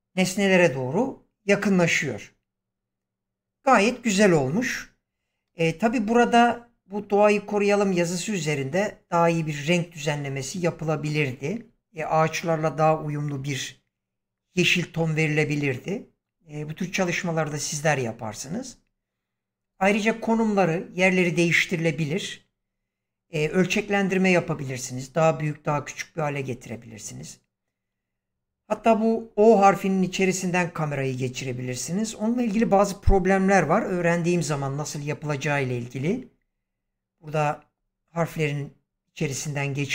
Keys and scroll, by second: 5.3 space.